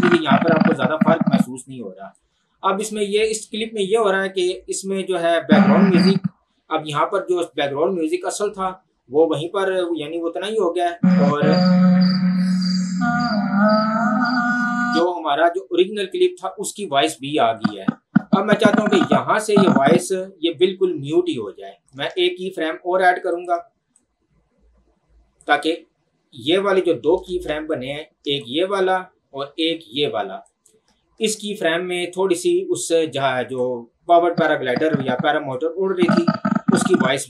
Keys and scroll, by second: 5.0 space, 11.0 space, 14.9 space, 22.3 ctrl+z, 27.3 ctrl+2, 33.5 Escape.